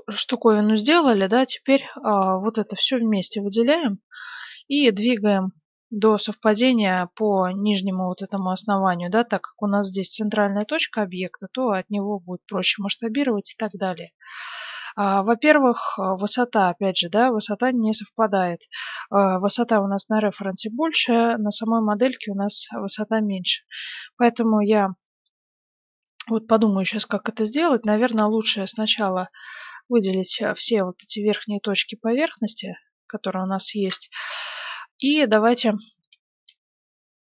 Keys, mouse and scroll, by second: 2.0 click, 2.9-4.2 right drag, 4.7 g, 8.1 z, 8.6-12.2 middle drag, 10.4 g, 14.7-21.3 middle drag, 21.3 Tab, 22.5 Tab, 22.6 middle click, 22.8-24.7 right drag, 23.6 Tab, 26.2 middle click, 28.3 ctrl+Tab, 29.4 a, 29.7 b, 31.6 z, 32.0-33.9 middle drag, 34.1 KP_1.